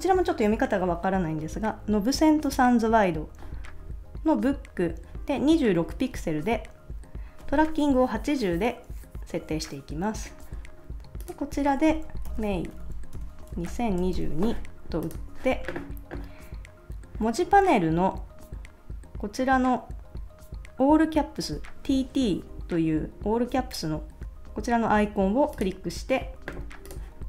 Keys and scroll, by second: 12.0-14.5 typing.